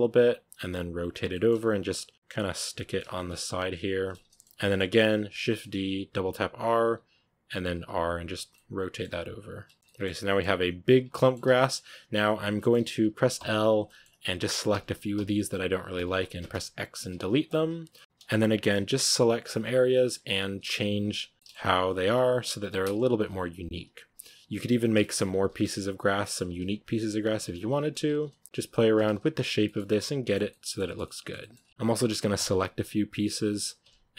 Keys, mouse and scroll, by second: 0.1-0.4 scroll up 1, 0.4 r, 1.2 middle click, 1.5 g, 2.1 middle click, 3.0 s, 3.4 r, 4.0-5.2 middle drag, 5.2-9.3 typing, 8.4-9.0 middle drag, 9.7 Tab, 9.7 scroll down 1, 9.8-10.3 middle drag, 10.3-10.7 scroll up 4, 10.7 right drag, 10.8 scroll down 1, 10.9 Tab, 11.0-11.3 middle drag, 11.3 a, 11.5 middle drag, 11.7 scroll up 2, 12.4-13.2 middle drag, 13.2 l, 13.7-14.6 middle drag, 14.6 l, 15.0 l, 15.8 l, 17.4-25.1 typing, 17.7 scroll down 1, 17.8 middle drag, 18.2 middle click, 21.3 middle click, 24.8 shift+middle click, 26.1 middle click, 26.3 ctrl+r, 27.1 g, 27.6 a, 28.4 g, 29.0 z, 29.5 shift+middle click, 30.2 scroll down 4, 30.3-31.4 middle drag, 31.4 scroll up 4, 31.7 middle click, 32.2 l, 33.7-34.1 typing.